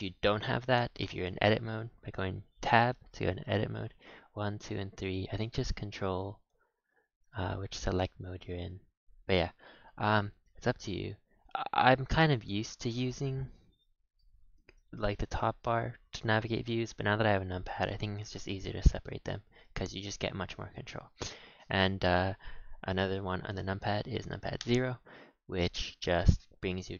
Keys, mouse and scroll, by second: 0.0-0.5 scroll up 4, 0.5 middle click, 1.5 Tab, 2.0 Tab, 3.1-4.2 shift+middle drag, 4.2-6.9 typing, 8.3 4, 8.7 5, 9.2 1, 10.1 Tab, 10.6 a, 10.7 a, 10.9-14.0 middle drag, 19.2-19.6 scroll down 1, 19.6-21.7 middle drag, 21.7-23.9 scroll down 3, 24.6 KP_0, 25.4 scroll down 1, 25.5-26.3 scroll up 13, 26.3-26.9 scroll down 14.